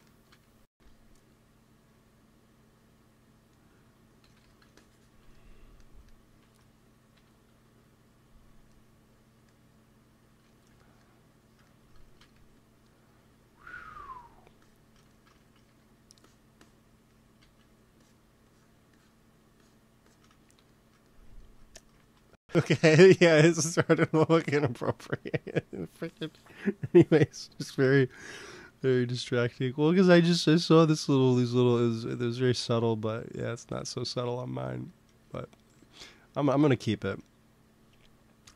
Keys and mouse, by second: 0.4 g, 0.6 f, 1.2-2.6 drag, 2.5 f, 4.1 x, 4.3 f, 6.3 ctrl+s, 7.0 KP_1, 12.0 shift+c, 12.2 f, 13.0 f, 14.0 f, 14.5-15.8 drag, 15.3 ctrl+z, 15.6 f, 17.4 ctrl+z, 19.2-21.9 drag, 21.9 ctrl+s, 27.6 KP_1, 29.2 ctrl+s, 31.6-33.9 drag, 33.9-38.5 middle drag.